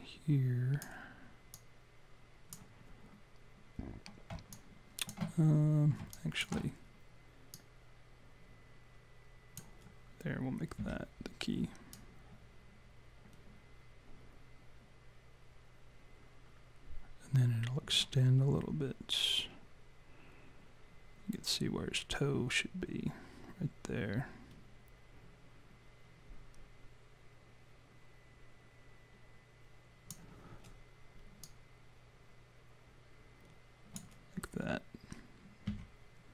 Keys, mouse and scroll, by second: 1.5 click, 4.5 alt+click, 4.7 alt+click, 6.1 alt+click, 7.5 click, 10.8 s, 12.0 click, 31.4 click, 35.7 s.